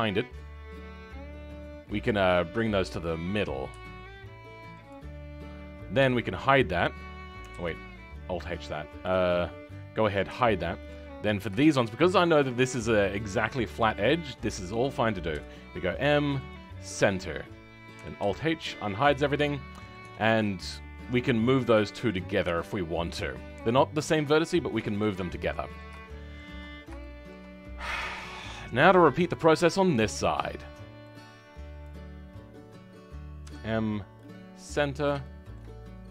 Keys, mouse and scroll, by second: 0.5-1.0 scroll up 4, 4.8 m, 5.9 h, 6.3-7.4 middle drag, 7.4 alt+h, 8.3-9.0 scroll up 2, 9.0 click, 10.2 h, 11.3 click, 12.3 shift+click, 16.4 m, 18.1 alt+h, 18.5 Tab, 18.8 scroll down 2, 19.1 middle click, 20.0 Tab, 20.8 scroll up 3, 22.4 g, 25.0-25.4 scroll down 4, 25.4-26.5 middle drag, 26.5-26.9 scroll down 6, 26.9 shift+middle click, 27.4-28.1 scroll up 7, 28.1 middle click, 28.8 scroll up 3, 29.0 shift+middle click, 29.5-31.0 scroll up 2, 31.0-31.8 scroll up 1, 31.8 click, 34.5-36.0 middle drag, 36.0 h.